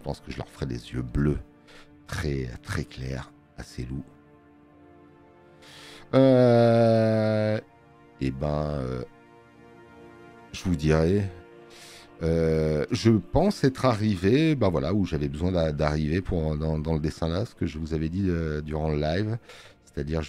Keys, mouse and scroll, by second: 3.2 click, 6.6 space, 6.6 click, 9.0 space, 10.4-11.6 drag, 15.6 click.